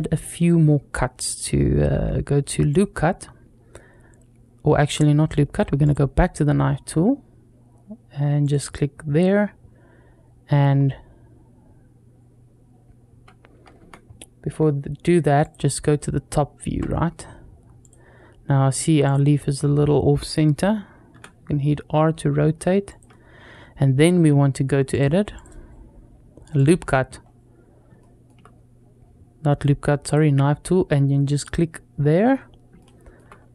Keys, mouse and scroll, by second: 2.6 click, 5.7 click, 8.3 click, 15.2 click, 15.9-16.4 scroll down 2, 16.7 scroll up 1, 17.7 click, 18.5-19.0 drag, 20.9 r, 24.7-25.3 drag, 26.4 click, 27.0-27.7 scroll up 1, 27.8 shift+middle click, 29.9 click, 31.2-33.5 drag, 31.6-32.0 scroll down 1, 32.6-33.5 shift+middle drag.